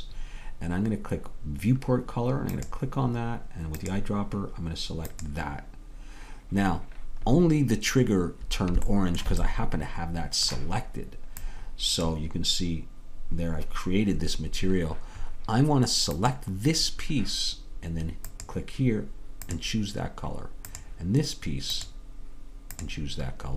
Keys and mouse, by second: 9.9-15.2 middle drag, 18.4-20.6 drag, 21.6-23.5 drag.